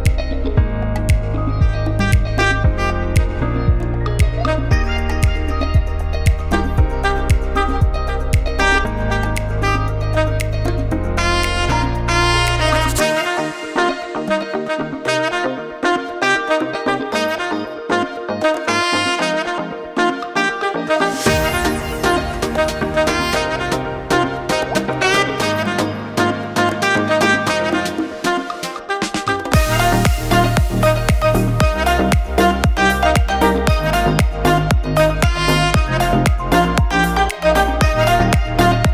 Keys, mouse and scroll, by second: 0.4 a, 2.1 click, 5.1 click, 8.6 Tab, 9.1 middle click, 11.4 shift+middle click, 12.3 click, 13.3 scroll down 1, 13.7 shift+middle click, 13.9 shift+middle click, 14.3 click, 15.0 Tab, 17.5 click, 19.6 click, 22.7 middle click, 24.9 shift+middle click, 27.9 click, 28.7 middle click, 29.8-30.2 scroll up 2, 31.8 ctrl+click, 32.3 middle click, 34.5 ctrl+e, 35.5 middle click, 37.1 click, 38.1 ctrl+click, 38.5 middle click.